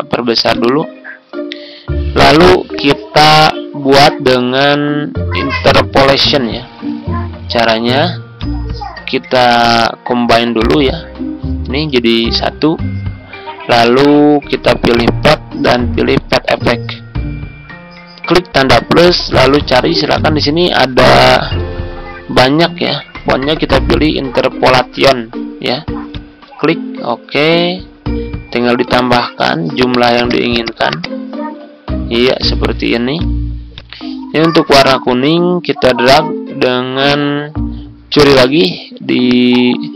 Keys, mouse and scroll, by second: 12.3 ctrl+z, 14.6 click, 20.8-22.1 typing, 26.0-32.4 drag, 34.7 ctrl+d, 35.0-39.9 drag.